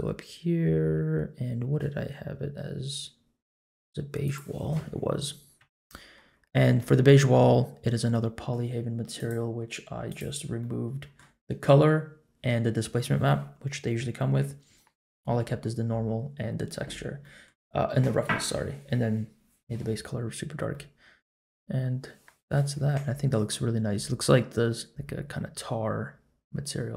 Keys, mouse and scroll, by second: 4.2 click, 5.6 Tab, 5.8-6.5 middle drag, 9.1-10.1 drag, 10.6 middle click, 17.2 middle click, 20.3-20.7 scroll up 2, 20.7-22.5 middle drag, 22.7-23.1 scroll down 2, 23.0-23.5 middle drag, 24.0 middle click, 24.7-26.9 middle drag.